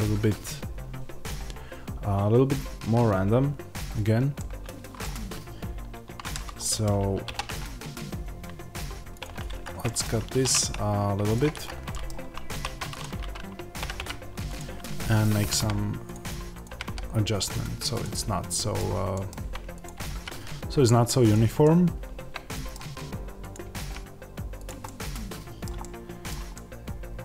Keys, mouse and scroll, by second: 5.9 Tab, 7.1 ctrl+r, 9.5 Escape, 11.5 Escape, 12.4 1, 12.8 click, 13.7 g, 14.4 click, 15.3 g, 16.0 click, 16.6 g, 17.9 click, 18.4-19.7 middle drag, 19.7 click, 19.8 g, 21.2 click, 21.5-23.4 middle drag, 23.4 click, 23.5 g, 24.5 click, 24.7-27.2 middle drag.